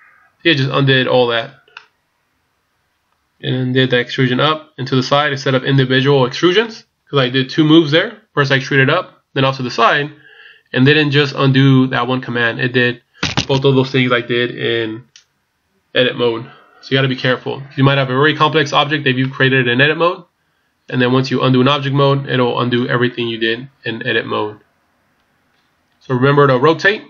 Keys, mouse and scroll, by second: 1.7 middle click, 19.2 middle click.